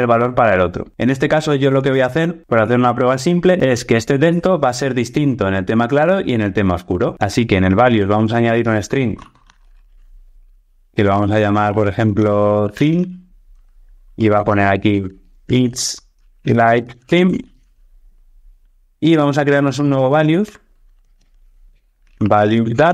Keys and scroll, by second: 20.3 super+n.